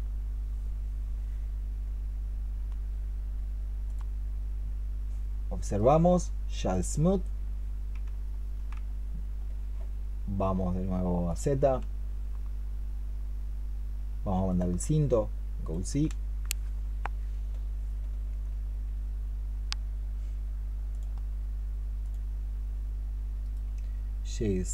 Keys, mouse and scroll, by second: 4.7-5.6 scroll down 4, 5.6 right click, 7.3 middle click, 23.3 right click.